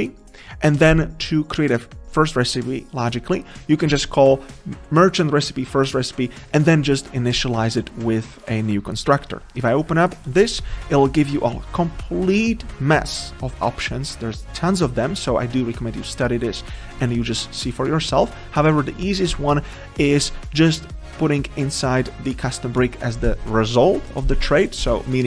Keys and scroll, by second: 10.1 ctrl+b.